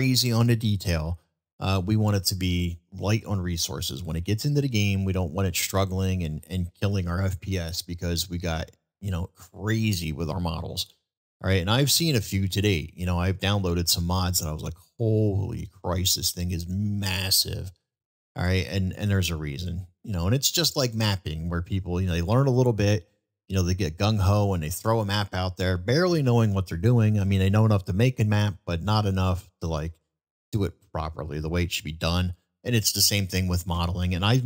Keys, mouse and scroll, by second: 1.4-1.8 middle drag, 2.1-2.6 middle drag, 3.3-3.7 middle drag, 4.7-5.3 middle drag, 7.1 shift+middle drag, 7.7-8.2 shift+middle drag, 10.0 shift+middle drag, 11.6-12.0 middle drag, 12.2 shift+middle drag, 12.8-13.1 middle drag, 13.9-14.7 middle drag, 15.1-15.4 shift+middle drag, 15.8-16.2 middle drag, 16.6-17.7 middle drag, 18.2 shift+middle drag, 18.5-18.9 shift+middle drag, 19.3 shift+middle drag, 19.7 middle drag, 20.3 shift+middle drag, 20.9 middle click.